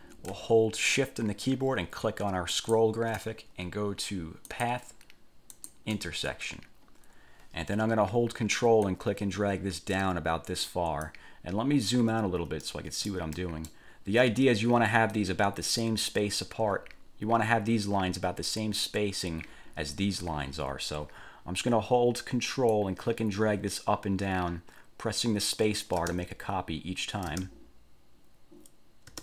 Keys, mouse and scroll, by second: 2.7 shift+click, 4.7 click, 5.7 click, 9.0-11.4 ctrl+drag, 12.0-12.6 ctrl+scroll down 2, 12.8 ctrl+click, 13.6 ctrl+click, 14.2 ctrl+scroll up 2, 14.6 ctrl+scroll down 2, 22.9-29.2 ctrl+drag, 26.2 ctrl+space, 27.4 ctrl+space.